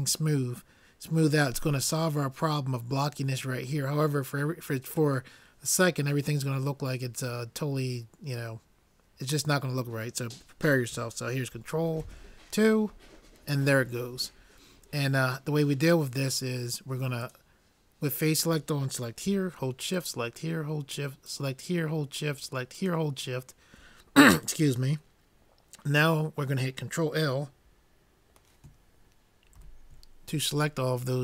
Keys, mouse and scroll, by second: 12.1 ctrl+2, 17.6-19.3 drag, 20.4-24.8 drag, 29.6 ctrl+l.